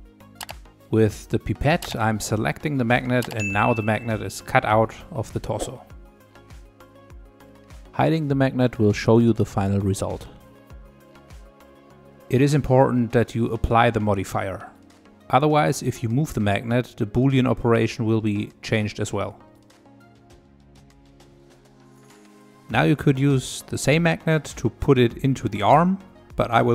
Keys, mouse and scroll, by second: 0.1 click, 3.5 click, 11.1 click, 12.1-14.7 middle drag, 14.7-17.8 drag, 26.4 middle click.